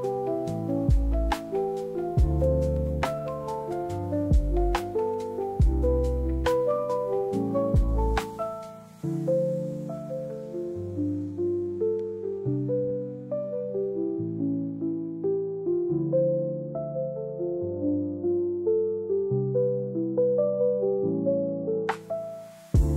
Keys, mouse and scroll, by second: 0.8 1, 1.4 click, 2.4 shift+click, 3.8 shift+click, 4.6 shift+click, 5.5 click, 6.4 click, 7.3 Tab, 8.0 ctrl+Tab, 13.0 click, 14.2 ctrl+Tab, 16.5 click, 17.6 drag, 19.2 click.